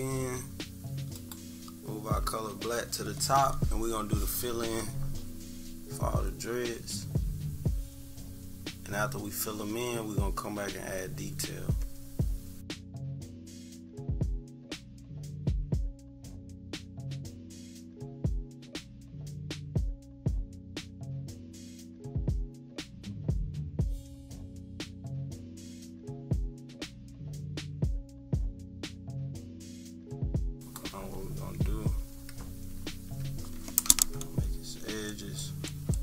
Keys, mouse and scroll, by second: 1.1-5.0 drag, 5.2-13.4 drag, 13.5 click, 14.4-16.0 drag, 16.0 -, 16.3 click, 16.5 =, 16.5 click, 16.7-20.1 drag, 20.1 -, 20.4-21.5 drag, 21.6 -, 21.8 click, 21.9 =, 21.9 click, 22.0 scroll down 2, 22.1 scroll up 4, 22.1 =, 22.3-24.2 drag, 24.2 click, 24.5 click, 24.7 -, 24.9 click, 25.0 =, 25.1 click, 25.1 =, 25.3-27.9 drag, 27.9-30.4 typing, 28.1 click, 28.3 click, 28.3 scroll up 1, 28.6 click, 28.9 scroll up 2, 29.2 click, 29.5 click, 29.7 click, 29.8 scroll down 1, 30.2 click, 30.5 click, 31.0 ctrl+=, 31.2-31.8 ctrl+scroll up 4, 31.5 ctrl+=, 32.2 scroll up 2, 32.4 =, 32.8 scroll up 2, 32.9 =, 34.5 click, 34.8 click, 35.2 click, 35.4 click, 35.7 click, 35.9 click.